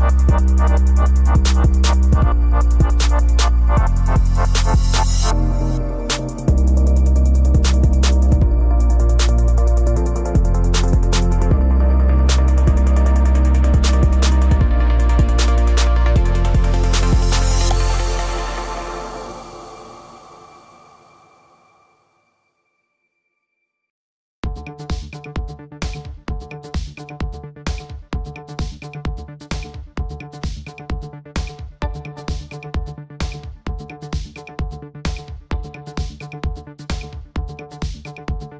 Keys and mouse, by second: 0.6 click, 1.7-5.2 typing, 6.1 click, 9.1 click, 9.8-11.4 typing, 10.0 Return, 10.4 click, 11.5 Return, 12.2 click, 12.4-14.3 typing, 12.5 Return, 12.8 click, 14.0 click, 14.3 Return, 15.1 right click, 15.3 click, 15.6-17.6 typing, 16.1 click, 16.3 right click, 16.7 KP_Subtract, 16.8 Return, 17.0 click, 18.1 right click, 18.6 drag, 19.0 click, 19.1 click, 19.3 right click, 19.6-24.4 typing, 19.7 Return, 19.8 click, 20.3 KP_Add, 20.4 KP_Add, 21.2 KP_Subtract, 21.3 KP_Subtract, 27.0 click, 31.0 click, 33.0 click, 38.5 click.